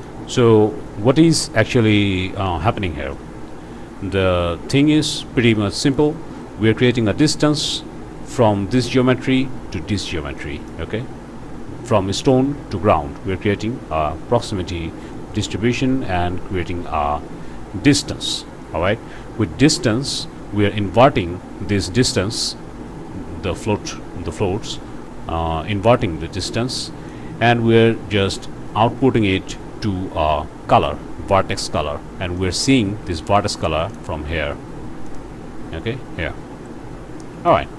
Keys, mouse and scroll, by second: 0.1 click, 5.2 scroll up 1, 5.7 click, 8.8 click, 10.4 click, 19.8 click, 25.9 click, 26.7 click, 32.4 click, 33.3 ctrl+shift+click, 33.9 ctrl+shift+click, 35.1 click, 35.8-37.7 drag.